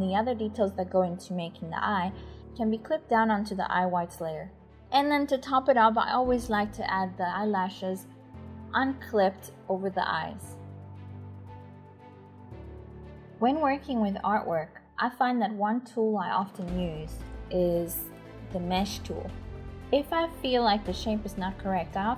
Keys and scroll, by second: 1.1-12.2 typing, 19.4-22.1 typing.